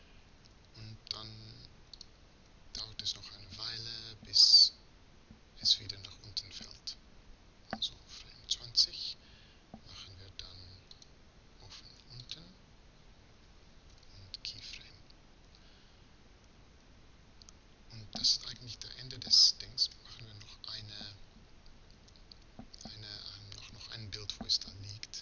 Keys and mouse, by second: 12.0-14.5 drag, 19.6 Right.